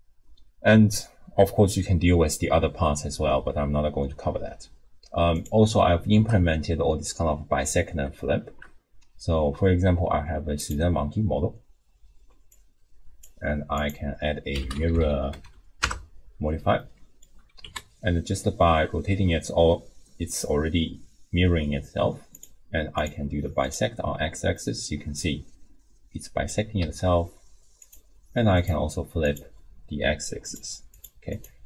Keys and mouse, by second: 5.3 click, 6.1 shift+a, 8.5 shift+a, 12.5 click, 13.8-15.9 drag, 14.9 r, 16.8 middle click, 17.6 r, 22.9 click, 23.7 click, 24.7-26.5 middle drag, 25.7-26.5 drag, 26.8 r, 28.5 click, 29.2 click, 30.5 click, 31.0 click, 31.3 click.